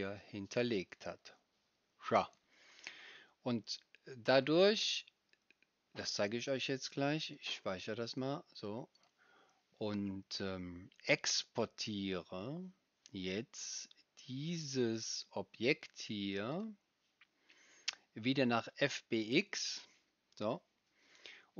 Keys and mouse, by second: 0.0 click, 0.0 right click, 0.6 click, 0.6 right click.